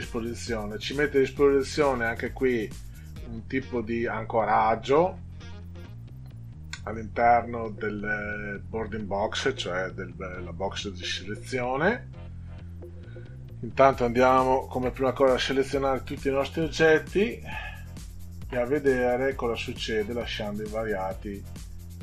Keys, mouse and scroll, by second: 13.9 click, 14.8 ctrl+a, 21.4 click.